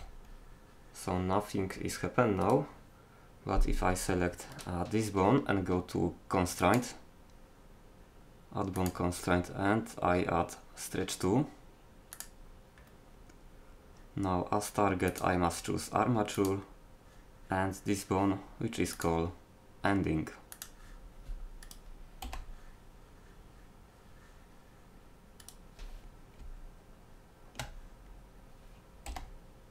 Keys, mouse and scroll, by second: 4.6-6.1 right drag, 6.4 middle click, 8.3 middle click, 15.1-16.9 middle drag, 19.0-20.8 drag, 21.6-23.5 right drag, 22.3 g, 26.4 z, 29.1 g.